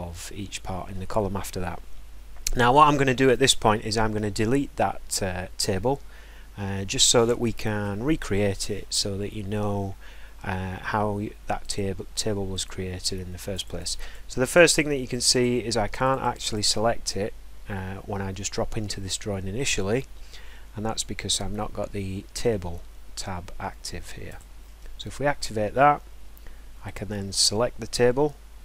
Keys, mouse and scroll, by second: 11.7 click, 12.6 click, 13.7 click, 13.8 click, 14.1 click, 14.5 click, 14.8 click, 15.2 click, 15.4 click, 16.1 click, 16.3 click, 16.5 click, 24.4 click, 26.9 click.